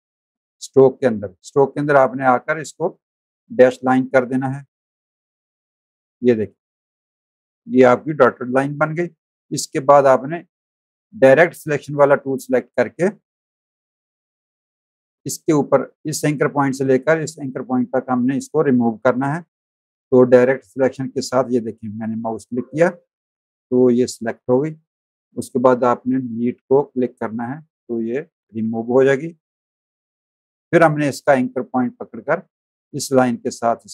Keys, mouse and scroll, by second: 0.9 click, 4.1 click, 5.7 click, 6.3 z, 6.6 click, 7.1 space, 7.2 click, 8.3 a, 8.7 click, 9.7 a, 14.6 click, 20.8 click, 22.7 click, 26.8 Delete, 27.8 click, 28.4 z, 28.7 click, 29.9 a, 30.7 click, 32.0 click.